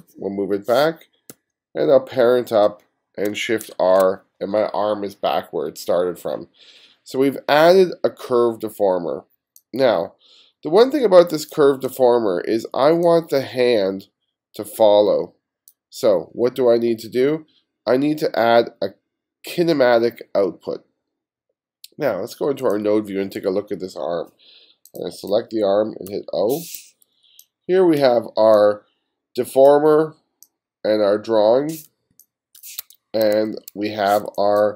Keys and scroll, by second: 1.4 b, 1.9 b, 3.7 shift+r, 26.2 o, 26.7 o, 32.2 space, 32.9 1, 34.3 space.